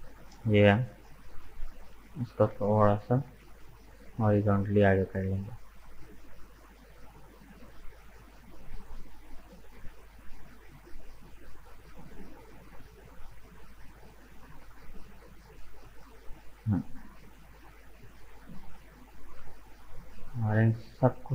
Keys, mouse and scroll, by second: 2.5 g, 6.5-9.4 middle drag, 9.4-9.7 scroll up 2, 9.7-14.2 middle drag, 14.2 right click, 14.9 shift+right click, 15.4 shift+right click, 15.9 shift+right click, 16.2-18.2 middle drag, 18.2 shift+right click, 18.7 shift+right click, 19.0-20.0 middle drag, 20.0 shift+right click, 20.4 shift+right click, 20.9 shift+right click.